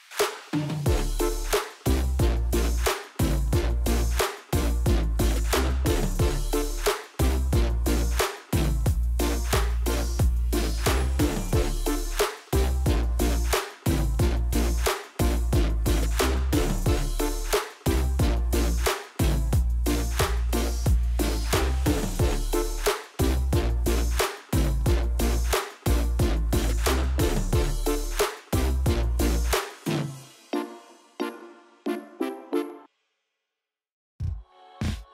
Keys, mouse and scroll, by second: 0.5-2.0 middle drag, 2.6 g, 3.6 click, 3.8 r, 5.7 Escape, 6.6 scroll down 2, 6.8 middle click, 7.5 r, 11.6 ctrl+click, 11.9 scroll down 2, 12.1-13.6 middle drag, 14.5 shift+d, 16.6 click, 16.8 KP_7, 18.6 g, 20.1 click, 20.5-21.5 middle drag, 21.5 click, 22.1 r, 26.8 KP_Enter, 27.4 click, 27.9 r, 29.4 KP_Enter, 29.9 click, 30.6 click, 31.0-31.3 scroll up 1, 31.8 click, 32.2 click, 33.3 click, 34.2 click, 34.8 KP_0, 35.0 KP_Enter.